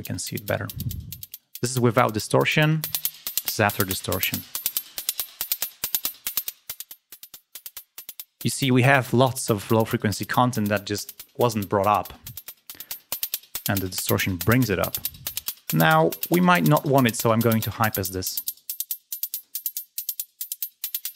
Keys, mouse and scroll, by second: 2.7 click, 5.0 click, 7.9 click, 12.7-14.0 drag, 16.6 click, 17.0 click, 19.2 click, 20.1 scroll down 1, 20.5-21.1 drag.